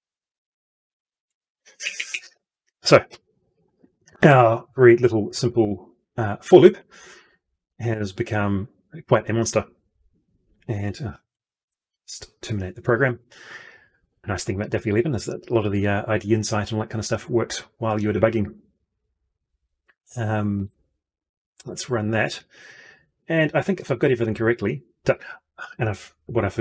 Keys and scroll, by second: 11.1 ctrl+F2.